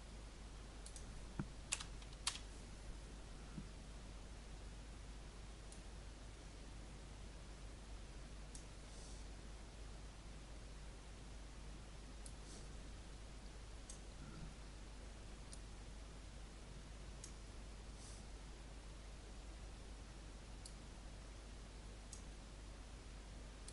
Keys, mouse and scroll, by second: 1.7 BackSpace, 2.2 Return, 5.7 click, 6.8-23.7 drag.